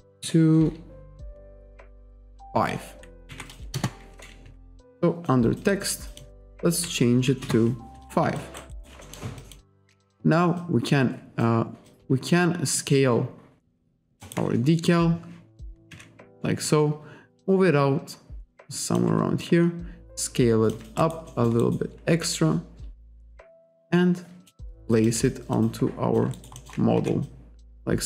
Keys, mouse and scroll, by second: 1.3-1.6 scroll down 1, 2.2 click, 3.3 5, 3.8 Return, 5.0 click, 5.7 click, 6.9 5, 7.4 Return, 8.4 alt+click, 8.7 alt+right click, 9.4 alt+click, 10.6 click, 11.9 click, 12.6 r, 12.8 click, 14.2 alt+right click, 14.9 click, 15.9 w, 16.7 click, 19.5 click, 21.0 alt+right click, 21.6 alt+right click, 22.3 w, 23.0 click, 25.2 r, 25.6 click, 26.4 alt+right click, 27.0 w.